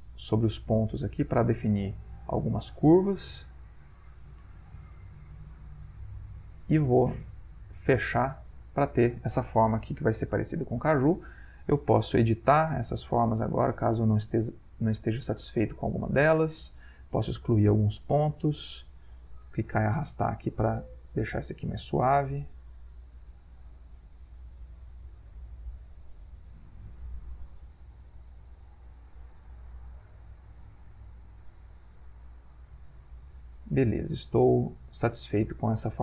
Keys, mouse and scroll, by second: 12.9 click, 16.1 click, 17.5 Delete, 18.0-19.3 drag, 20.1-21.3 drag, 22.1 click, 22.4 Delete, 23.3-25.1 drag, 25.8-27.8 drag, 28.3 click, 28.7-29.9 drag, 30.8 click, 31.7-33.8 drag, 34.2 click, 35.6 click.